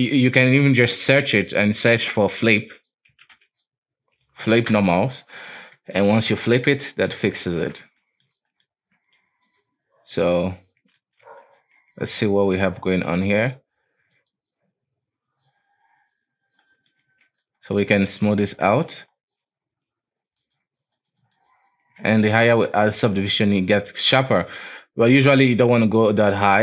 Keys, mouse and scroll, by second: 0.7 F3, 5.9 Tab, 6.4-10.3 middle drag, 10.3 click, 11.1 alt+w, 11.5 middle drag, 11.7-12.8 scroll up 2, 12.8-16.8 drag, 16.8-17.2 middle drag, 17.2 alt+a, 17.5 right click, 17.9 w, 18.6 alt+a, 18.9-19.2 middle drag, 19.2-20.2 scroll up 2, 20.2 scroll up 1, 20.5-21.9 drag, 21.9 scroll down 1, 22.2 alt+a, 22.4 middle click, 22.9-23.3 scroll up 2, 23.3-25.4 middle drag, 25.4-26.6 drag.